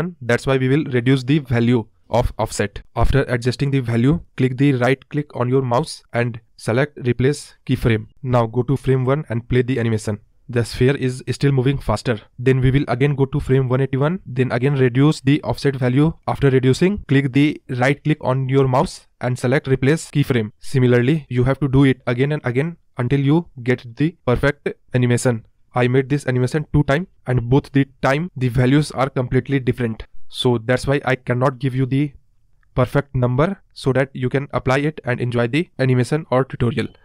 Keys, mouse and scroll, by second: 1.7-4.5 shift+drag, 6.9-7.6 right drag, 7.6 click, 8.2 space, 9.5 space, 9.9 space, 10.3 space, 11.1-11.9 drag, 11.9 Right, 12.4 Left, 13.7-16.6 shift+drag, 16.6-17.3 right drag, 17.3 drag, 17.5 space, 18.8 space, 19.1-20.3 drag, 20.7 right click, 20.8 click, 20.9 space, 21.3 space, 21.6 shift+click, 22.7 right click, 22.9 click, 22.9 space, 23.0 scroll down 1, 23.1-23.4 scroll up 2, 23.4 space, 23.5 scroll down 1, 23.5 scroll up 1, 23.7 click, 23.8 Right, 24.1 shift+click, 24.7 right click, 24.8 click, 24.9 space, 25.1 scroll up 4, 25.2-25.5 scroll down 5, 25.5 space, 25.6-27.5 drag, 27.8 right click, 28.0 click, 28.1-31.1 typing, 28.2 scroll up 4, 28.5-29.0 scroll down 13, 29.3 click, 29.5 scroll up 1, 30.0 scroll up 1, 30.1 scroll down 1, 30.2 click, 30.4 scroll up 8, 30.6-31.0 scroll down 1, 31.3-32.4 click, 31.9-32.8 drag, 33.0 click, 33.9 right click, 34.0 click, 34.1 space, 34.3 space, 34.5 space, 34.9-37.0 drag.